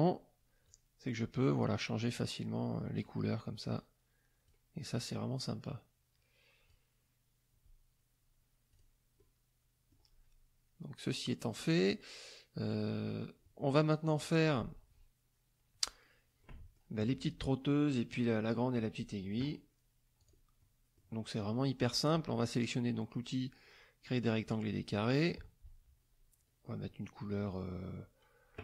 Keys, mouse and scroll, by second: 0.6-3.2 drag, 3.7 click, 5.0-6.8 drag, 8.7 click, 9.2 middle click, 13.8 click, 16.4 click, 20.2 click, 20.6 click, 22.4-25.5 drag.